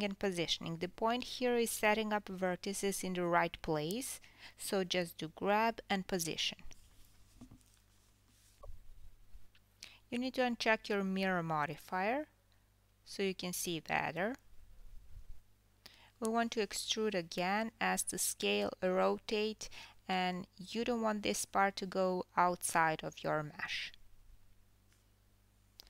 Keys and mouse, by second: 0.1 s, 3.6 g, 7.6 g, 11.8-18.7 drag, 16.0 KP_3, 16.7 KP_1, 17.8 KP_7, 18.1 e, 18.7-25.8 middle drag, 18.7 s, 19.6 r, 21.5 KP_7, 22.0 KP_1, 22.0 g, 22.6 g, 23.4 alt+drag, 24.3 KP_7.